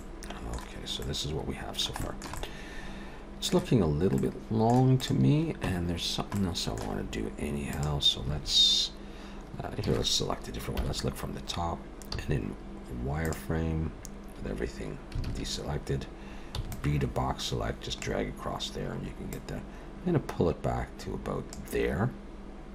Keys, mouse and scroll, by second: 0.0 middle click, 0.7-1.4 scroll down 3, 1.0 middle click, 2.0 shift+middle click, 2.4 middle click, 4.2 middle click, 5.0 click, 5.7 Tab, 6.3 middle click, 7.0-7.7 scroll up 2, 7.7 click, 8.8-9.8 scroll up 2, 9.8 a, 10.8 KP_7, 12.1 z, 15.2 alt+a, 16.5 b, 19.3 click.